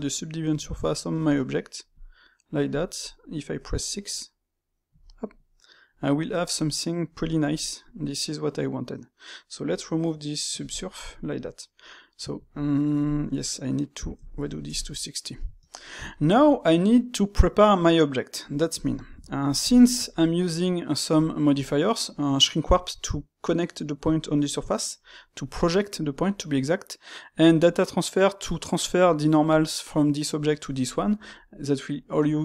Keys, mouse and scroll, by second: 0.7 click, 1.1 space, 3.0-8.2 middle drag, 11.4-12.3 middle drag, 14.6 shift+q, 15.4-24.2 middle drag, 27.8-30.8 middle drag.